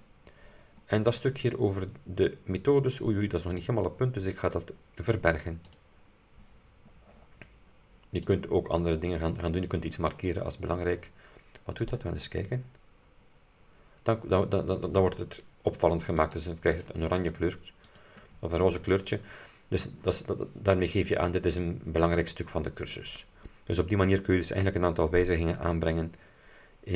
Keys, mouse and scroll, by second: 1.0-2.0 scroll down 4, 3.7 click, 5.8 click, 8.3 click, 11.9 click, 16.3 click, 18.0 click, 24.6 click.